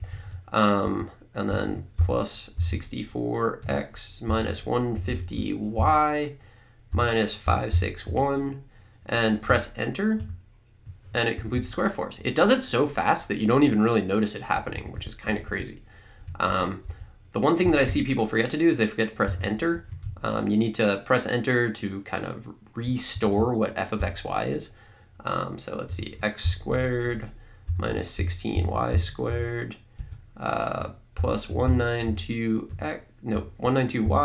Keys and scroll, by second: 0.0 Right, 0.8 Left, 1.5 Right, 2.3-5.7 typing, 6.9-8.5 typing, 10.2 Return, 11.4 Down, 14.6 Up, 16.9 Left, 19.8 Left, 24.0 Delete, 25.9-29.8 typing, 27.0 Right, 30.0 Right, 31.3-34.2 typing.